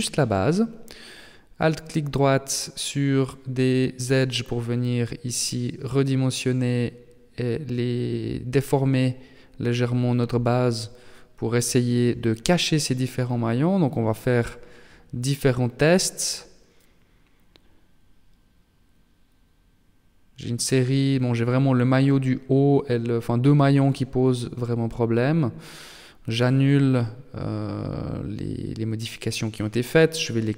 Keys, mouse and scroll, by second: 0.2 scroll up 3, 0.4-1.0 scroll down 1, 1.0 alt+right click, 1.6 middle click, 3.6 alt+shift+right click, 4.4 s, 8.5 Tab, 9.2 Tab, 9.6 middle click, 12.2 alt+right click, 13.0 alt+shift+right click, 13.8 alt+right click, 14.3 alt+shift+right click, 14.8 middle click, 16.8 middle click, 19.8 middle click, 23.0 ctrl+z, 23.3 ctrl+z, 23.4 ctrl+z, 23.7 ctrl+z, 23.9 ctrl+z, 24.7 middle click, 25.8 middle click, 26.6 KP_3, 28.0 s.